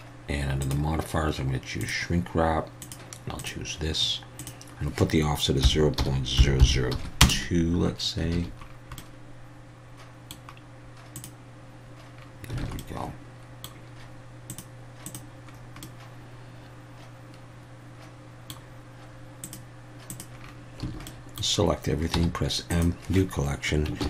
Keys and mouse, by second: 4.4-7.4 drag, 6.6 0, 8.3 alt+a, 9.0-10.3 middle drag, 11.2 click, 12.6 alt+a, 12.8-13.6 middle drag, 14.5 click, 15.0 click, 15.8-18.5 middle drag, 19.4 click, 20.1 click, 20.8 a, 21.1 middle click, 22.1 m.